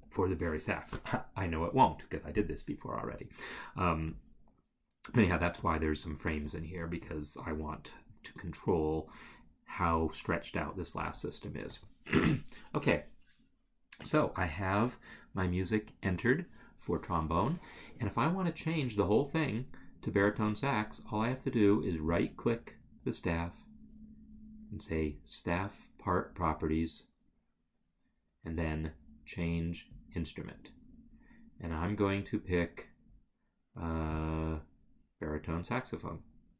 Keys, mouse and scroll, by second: 22.1 ctrl+Delete, 29.9 click, 34.1 click.